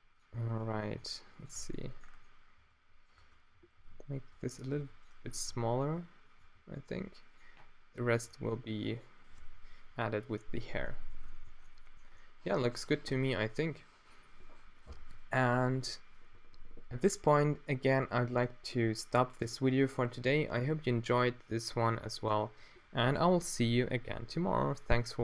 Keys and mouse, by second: 0.7 g, 1.6 Tab, 3.2 Tab, 3.6-6.4 typing, 8.2 g, 9.4 Tab.